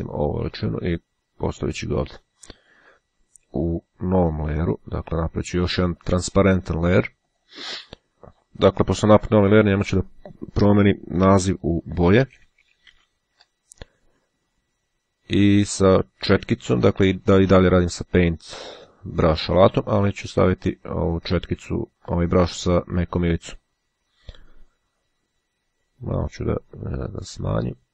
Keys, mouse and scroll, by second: 1.4 click, 2.9 ], 4.2 click, 6.3 click, 7.3 click, 11.7-13.0 typing, 16.1-17.6 drag, 20.9 click, 25.8 [.